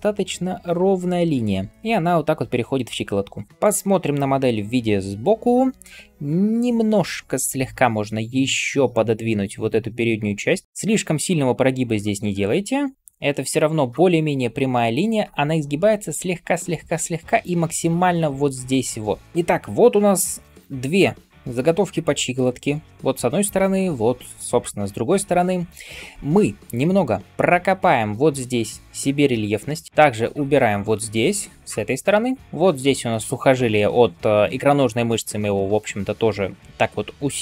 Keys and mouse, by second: 27.3 [, 31.9-37.4 drag, 31.9-37.4 middle drag, 31.9-37.4 right drag.